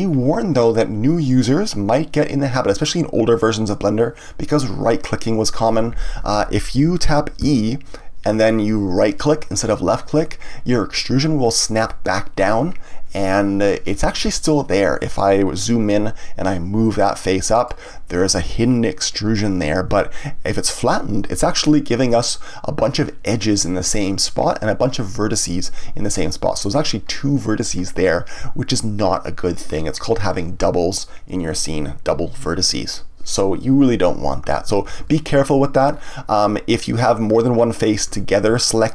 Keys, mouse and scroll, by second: 6.0 ctrl+z, 9.0 right click, 15.0-17.0 scroll up 2, 17.0-19.9 drag, 19.9 ctrl+z, 34.8 ctrl+z, 35.9-37.8 scroll down 1, 37.8 click, 38.7 shift+click.